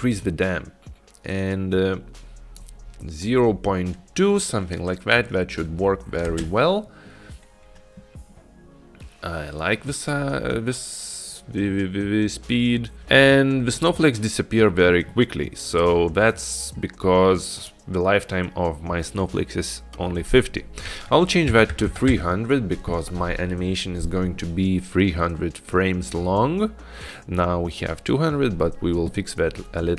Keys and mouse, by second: 0.0-2.7 drag, 5.9-6.7 drag, 6.5 space, 13.0 space, 17.7-22.9 drag, 21.9 KP_0.